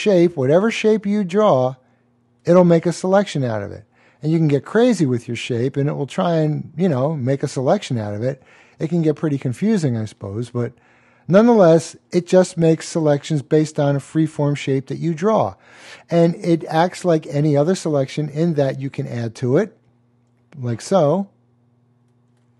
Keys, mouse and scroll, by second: 2.9 click, 8.3 click, 12.1 click, 19.2 click.